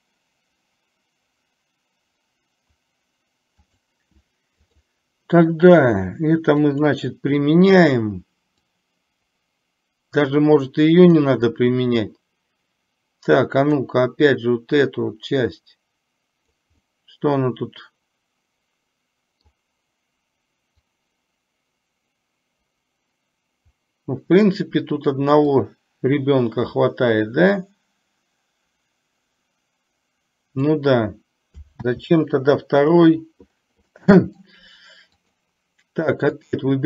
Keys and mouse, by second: 4.6 click, 6.8 click, 8.8-11.3 drag, 13.8 click, 15.1-16.6 drag, 16.7-19.6 middle drag, 21.0-24.6 drag, 25.7-30.8 drag, 34.0-34.3 middle drag, 35.2 click, 36.5 click.